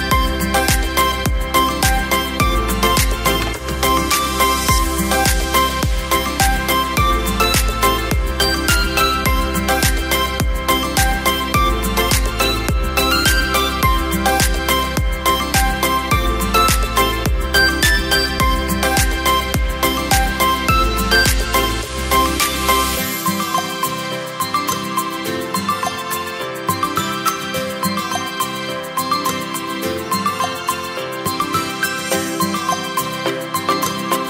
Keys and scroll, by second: 4.9 space, 5.8 t, 8.3 g, 17.3 v, 26.5 o, 32.2 b, 32.4 a, 32.6 b.